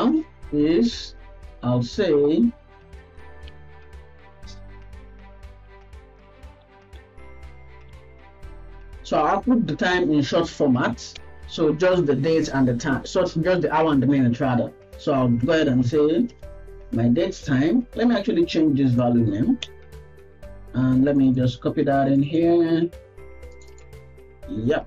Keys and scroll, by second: 1.3 Left, 1.6 Left, 1.9 Right, 2.5 Left, 19.8 BackSpace, 22.5 ctrl+v, 23.9 ctrl+v.